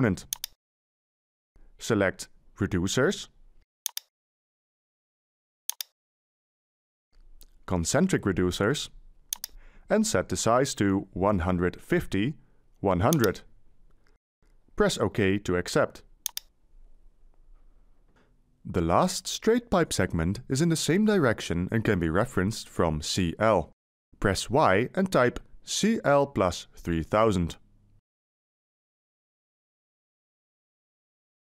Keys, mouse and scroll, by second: 25.5 Delete, 27.6-28.4 typing, 30.0 3, 30.7 0, 31.4 0.